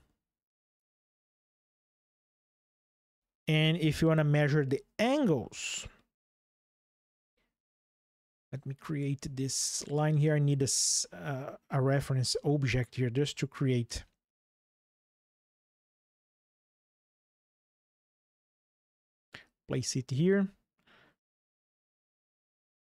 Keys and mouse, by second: 0.5 click, 2.6 Delete, 4.0 shift+click, 7.9 ctrl+click, 9.7 click, 14.7-15.7 drag, 16.9 click, 21.3 click.